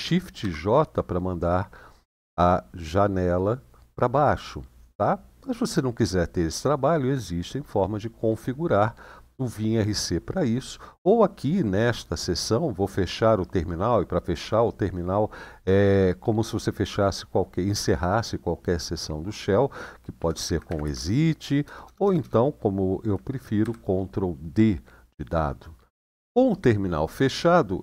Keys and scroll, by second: 0.1 shift+j, 20.0-21.7 typing, 23.3 ctrl+d.